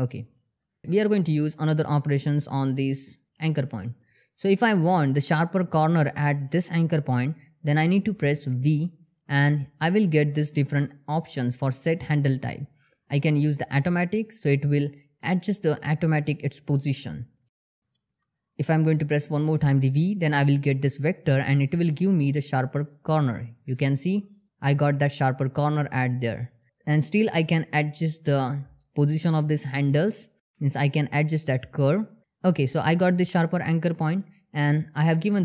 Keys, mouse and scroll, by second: 0.5 click, 2.2 click, 3.1 shift+middle click, 4.1 click, 8.1 v, 13.3 click, 17.5 ctrl+z, 18.9 v, 22.8 v, 23.8 click, 26.1 click, 27.2 g, 32.2 click, 35.1 g.